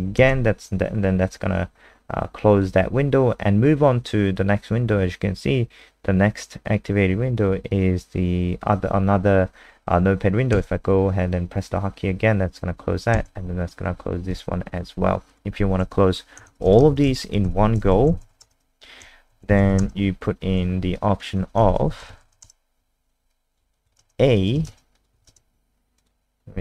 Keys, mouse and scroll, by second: 14.3 click, 16.4-20.2 typing, 17.4 ctrl+s, 20.9 alt+click, 21.6-22.8 typing, 23.7 click, 24.0 ctrl+alt+space, 24.6 ctrl+alt+space, 24.9 click, 26.0 click.